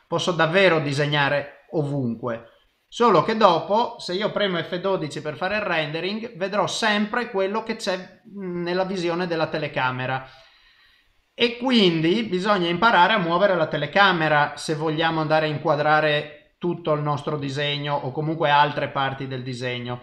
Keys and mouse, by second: 0.1 middle click, 1.1 click, 2.0 middle click, 4.1 middle click, 5.6 F12, 14.9 KP_0.